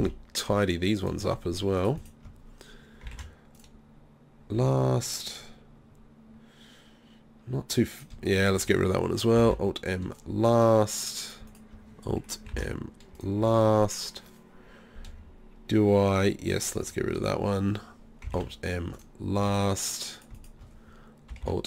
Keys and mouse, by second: 0.0 alt+m, 3.2 alt+m, 4.6 z, 9.5 alt+m, 10.5 z, 12.6 alt+m, 13.4 z, 15.9-17.8 drag, 18.4 alt+m, 19.4 z, 21.5 alt+m.